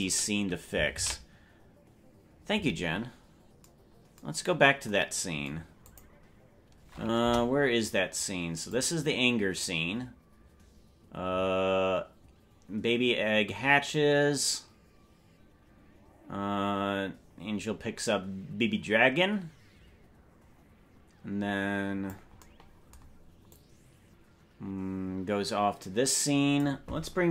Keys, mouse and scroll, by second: 4.4 ctrl+s, 5.9 click, 7.2 KP_0, 8.8-22.2 drag, 23.6-26.7 drag.